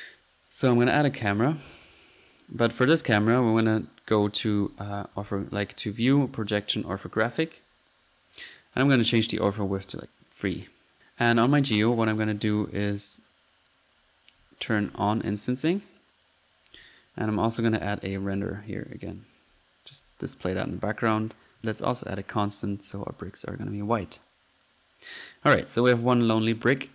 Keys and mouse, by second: 0.0-0.9 drag, 0.6-1.4 typing, 1.5 click, 2.0-2.5 drag, 2.6-3.2 middle drag, 3.6-4.0 drag, 4.6 drag, 5.2 click, 6.7-7.7 middle drag, 9.4 click, 12.8 drag, 13.7 click, 14.4 drag, 14.8 click, 14.9-15.4 drag, 15.5-16.2 middle drag, 16.8-17.4 drag, 17.4-18.1 typing, 18.2-18.5 drag, 19.6-20.0 drag, 20.0 click, 21.1 click, 21.6 click, 21.6 c, 21.7-22.2 drag, 22.2 click, 22.7 click, 23.1 click, 23.9 click, 24.0 drag, 24.6 click, 24.8 click, 26.2 middle click.